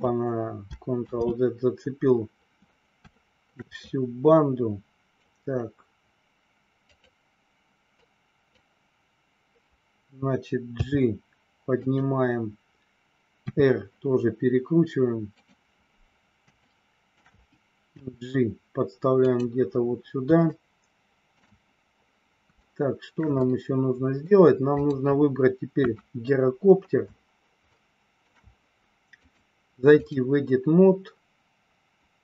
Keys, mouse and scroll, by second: 1.0 ctrl+z, 3.2 shift+middle click, 3.8-5.3 drag, 6.8 click, 7.9 click, 10.6 g, 11.8 click, 13.4 r, 15.3 click, 16.5 shift+middle click, 18.0 g, 20.5 shift+middle click, 22.6 scroll up 1, 22.8 shift+middle click, 23.3 scroll up 1, 23.5 middle click, 24.8 click, 25.6 KP_1, 27.6 shift+middle click, 29.3 click.